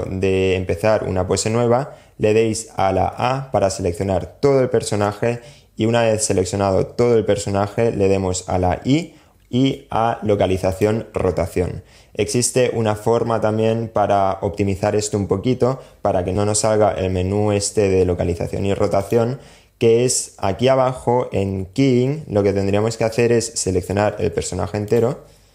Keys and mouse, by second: 2.4 a, 7.8 i, 16.3 i, 23.6 a, 24.1 click, 24.6 a.